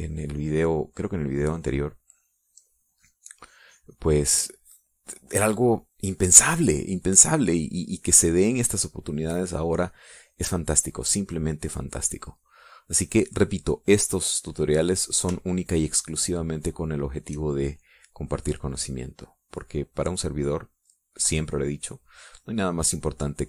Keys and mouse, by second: 0.8-5.0 drag, 7.5 middle click, 9.6-11.4 drag, 11.7 middle click, 12.7 middle click, 14.4 middle click, 17.0-18.3 shift+drag, 19.5-23.1 drag.